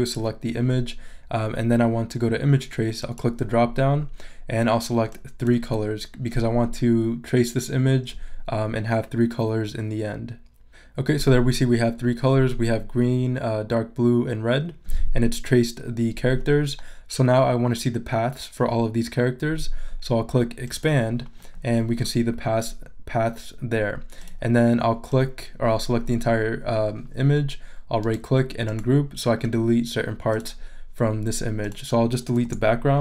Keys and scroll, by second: 32.4 BackSpace.